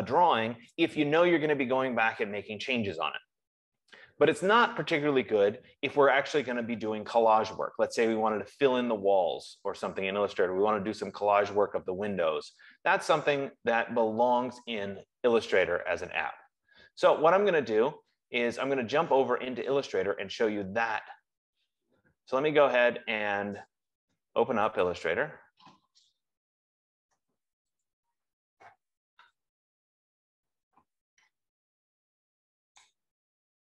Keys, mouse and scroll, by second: 25.4 click, 28.2 click, 30.5-33.3 drag.